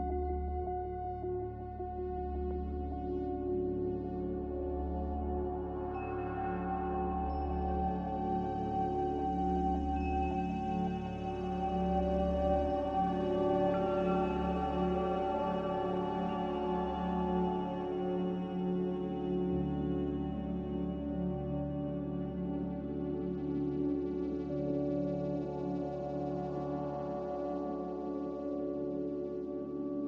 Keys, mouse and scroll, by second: 3.1 n, 5.6 Escape, 5.8 Escape, 6.4 Escape, 6.5 Escape, 6.8 b, 7.8 Escape, 7.9 Escape, 8.0 Escape, 9.8 a, 11.5 z, 22.4 z.